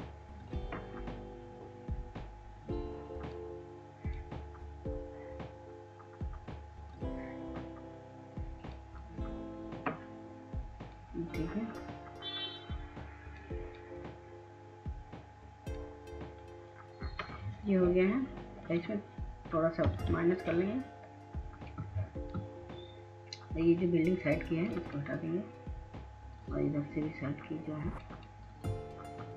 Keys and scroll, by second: 21.5 ctrl+alt+z.